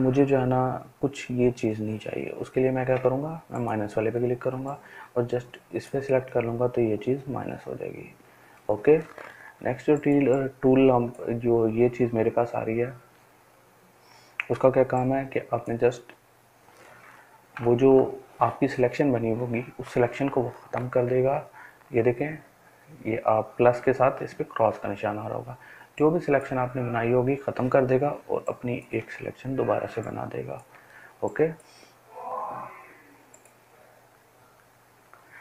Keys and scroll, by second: 17.7 ctrl+z.